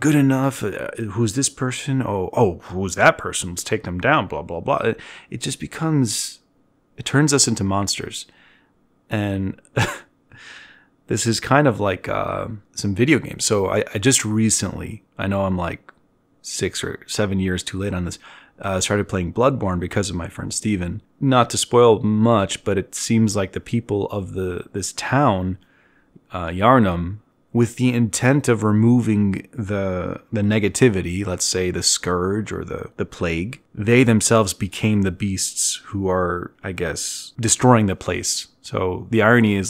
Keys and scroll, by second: 9.1 z, 9.7 b, 12.0 z, 18.6 z, 19.6 t, 25.0 z, 29.9 e, 32.6-33.8 typing.